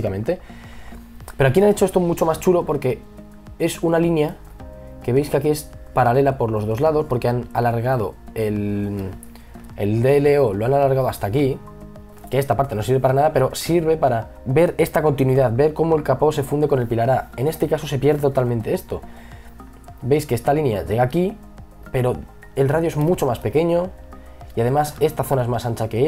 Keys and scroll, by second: 9.5 ctrl+z.